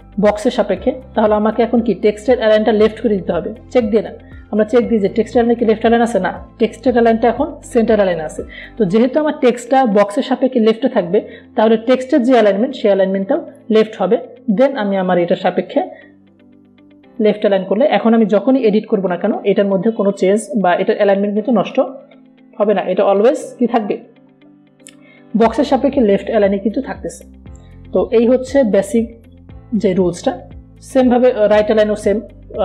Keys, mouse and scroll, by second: 1.9 click, 5.9 click, 15.0-17.7 drag, 21.7 ctrl+a, 22.5-26.8 typing, 28.1-32.6 drag.